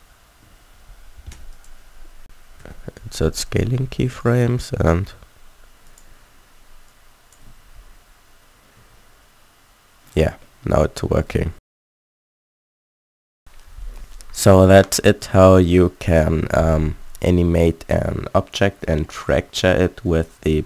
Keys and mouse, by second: 0.4 s, 2.5 s, 2.5 i, 4.1-6.0 drag, 7.4 alt+a, 8.7 a, 10.9 a, 11.3 a.